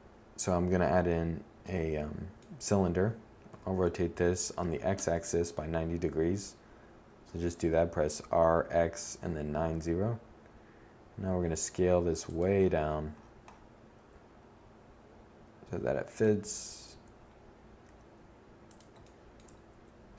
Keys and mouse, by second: 1.2 KP_1, 2.0 r, 8.3 s, 12.5 s, 14.4 click, 14.9 7, 16.3 s, 17.3 drag, 18.2 z.